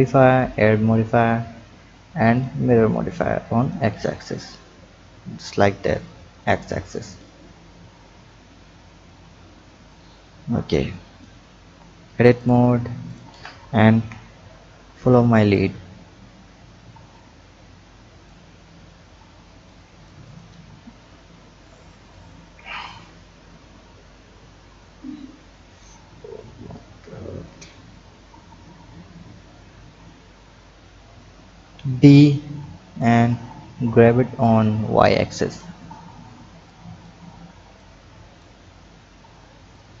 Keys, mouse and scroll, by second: 0.4-3.4 drag, 3.5 click, 4.0 click, 6.3 click, 9.9 click, 11.6 Tab, 12.4 click, 13.0 shift+click, 13.9 KP_7, 14.4-15.5 scroll down 3, 15.5-18.5 drag, 18.5-19.2 scroll down 3, 19.6-20.4 drag, 31.5 b, 34.4-38.6 drag, 38.6-39.6 scroll down 2, 39.6 scroll down 1, 39.7-40.0 drag.